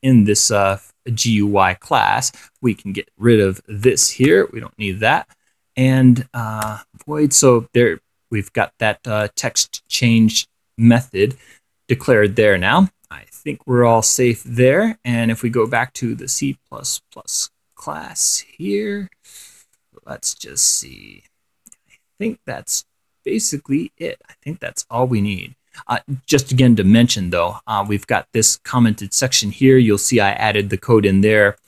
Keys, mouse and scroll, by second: 0.1-1.2 drag, 1.4 click, 2.7 click, 4.1 Delete, 6.0 click, 8.6-9.7 drag, 10.1 click, 11.4 click, 13.7-14.2 scroll down 2, 14.2-14.6 scroll up 2, 15.9 click, 16.2-17.8 scroll up 1, 18.0 click, 20.0-26.4 drag, 28.1-29.9 drag, 30.1 scroll up 1, 30.9 click.